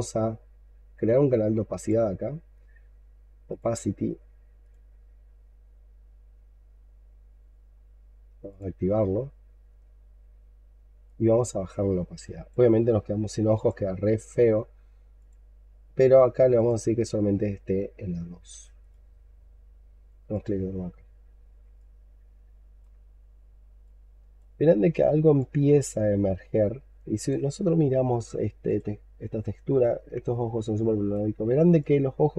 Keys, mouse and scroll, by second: 6.2-7.6 scroll down 8, 7.6 scroll down 1, 7.6 scroll up 5, 8.7-9.9 scroll down 10, 9.9-15.0 scroll down 1, 21.0 scroll up 2, 21.6 alt+click, 22.9-23.6 scroll up 6, 23.7 alt+click, 24.5-25.1 scroll up 7, 25.2 alt+click, 27.4-28.5 scroll down 9, 30.1 scroll down 2, 30.2 alt+click, 31.2-31.7 alt+scroll down 5, 31.7 alt+click.